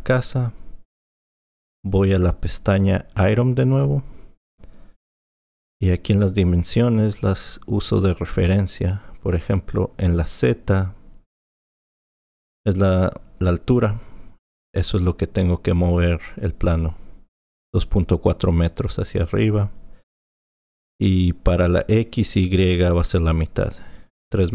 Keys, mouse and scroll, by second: 3.8 click.